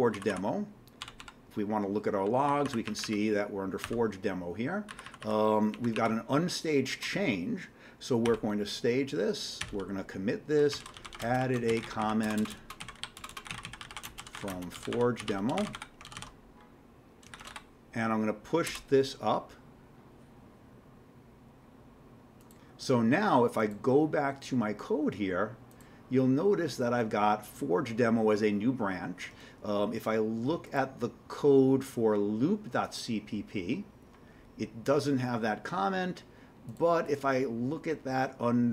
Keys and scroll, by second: 0.1 Down, 0.3 Down, 1.0 typing, 2.5 Down, 2.6 Down, 2.8 Up, 3.0 Up, 3.8-6.4 typing, 8.3 typing, 9.4-17.8 typing, 18.7 Return.